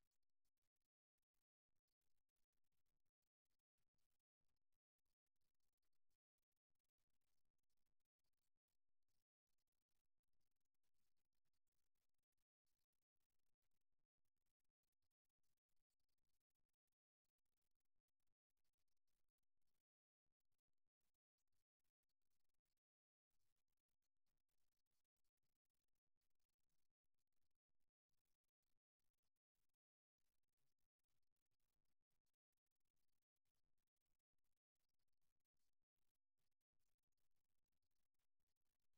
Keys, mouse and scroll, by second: 4.3-6.2 middle drag, 7.4-9.1 right drag, 9.1-12.5 middle drag, 12.5-13.5 drag, 16.3-18.2 middle drag, 20.1-23.1 middle drag, 23.5-25.5 middle drag, 27.0-32.2 middle drag, 33.4 KP_3, 34.9-36.9 middle drag, 36.5 e.